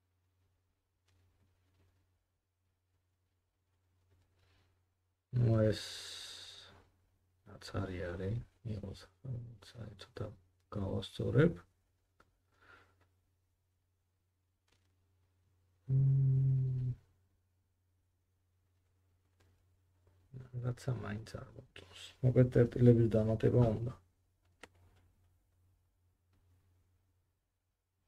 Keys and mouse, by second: 2.7 middle click, 2.9-8.9 drag, 3.3 g, 8.9 middle click, 9.1 g, 10.6 click, 11.1-19.4 drag, 11.5 g, 19.4 g, 20.9-26.5 drag, 22.3 middle click, 22.3 right click, 23.4 g, 26.6-27.9 drag, 27.9 middle click.